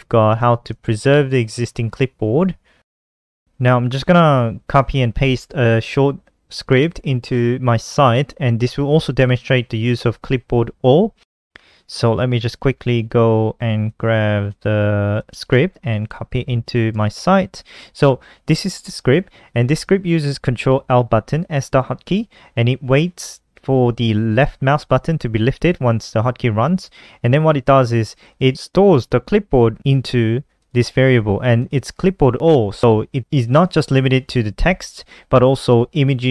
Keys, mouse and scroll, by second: 0.4 click, 1.1 Down, 1.9 shift+Home, 2.1 shift+Up, 2.3 shift+Up, 2.5 shift+Up, 2.7 shift+Up, 3.0 shift+Up, 3.2 shift+Up, 5.9 click, 6.5 Return, 6.8 Return, 7.2 ctrl+alt+r, 13.8 click, 15.2 ctrl+c, 16.0 click, 16.6 ctrl+v, 16.9 Return, 17.7 ctrl+s, 20.7 click, 28.1 click, 28.2 click, 30.3 click, 30.4 click, 31.3 click, 31.5 click.